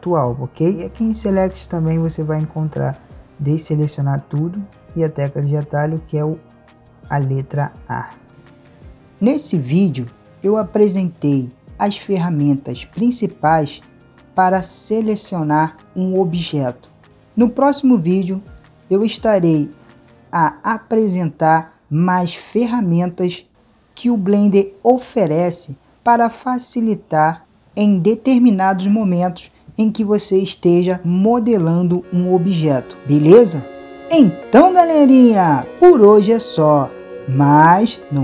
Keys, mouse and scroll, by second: 1.1 click, 13.3-20.2 middle drag.